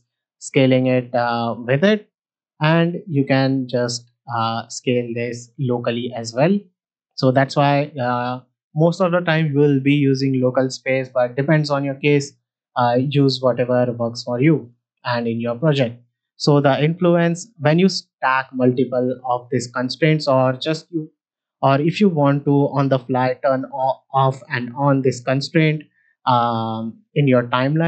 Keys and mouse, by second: 2.2 click, 2.6 s, 3.9 s, 13.6-14.7 drag, 16.5-19.0 drag, 23.4-24.9 drag, 26.6 click.